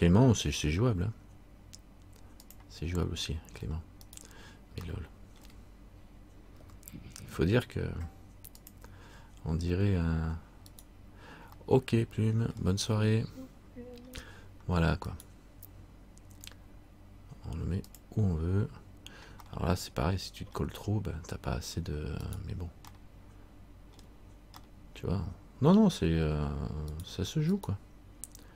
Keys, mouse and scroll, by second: 0.8 g, 3.2 middle click, 4.2 right click, 5.1 shift+middle click, 6.8 g, 11.7 right click, 11.8 middle click, 14.2 scroll down 1, 15.2 right click, 16.6 g, 19.6 middle click, 22.4 right click, 23.1 middle click, 24.8 middle click, 27.1 right click, 28.0 right click.